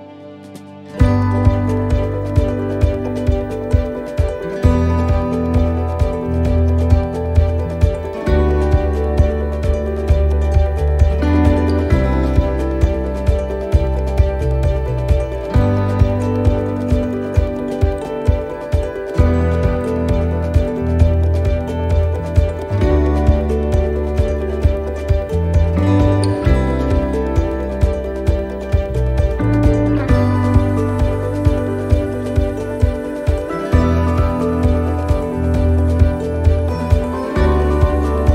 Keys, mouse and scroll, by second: 1.0 s, 3.2 shift+middle click, 5.7 right click, 7.2 ctrl+r, 10.4 right click, 11.4 shift+right click, 13.2 s, 15.6-16.3 scroll down 1, 16.3 middle click, 18.5 l, 19.0 middle click, 20.5 click, 23.9 ctrl+z, 24.4 middle click, 26.2 middle click, 29.4 middle click, 30.7-31.3 scroll down 1, 31.3 scroll down 2, 31.6 middle click, 34.7 click.